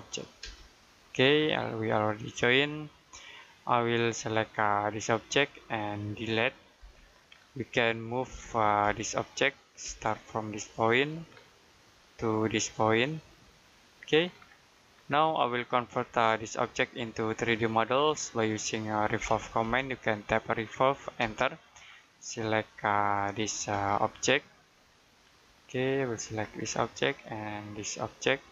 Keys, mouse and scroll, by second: 0.3 space, 0.8 click, 1.3-3.0 scroll down 1, 3.0 Escape, 3.3 middle click, 3.6-4.3 scroll up 1, 4.4 click, 6.7 Delete, 7.2 scroll down 1, 7.5 middle click, 8.7 space, 9.1 click, 9.7 space, 9.9-10.5 scroll up 1, 10.9 click, 11.9-13.6 scroll up 1, 13.6 click, 14.1-15.3 scroll down 1, 15.3 middle click, 15.8-16.3 scroll down 1, 16.3 middle click, 16.8-17.2 scroll down 1, 17.2 middle click, 19.0 r, 21.1 space, 21.7 click, 23.3 Escape, 23.9 click, 24.6-26.1 scroll up 1, 26.1 click, 26.5-27.0 scroll down 1, 27.0 middle click, 28.4 click.